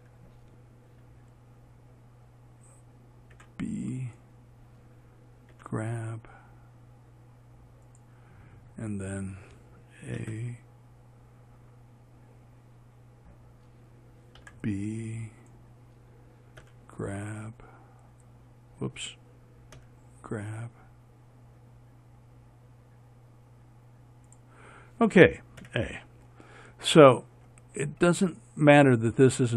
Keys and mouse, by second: 3.6 b, 5.8 g, 10.5 a, 14.7 b, 16.9 g, 25.9 a.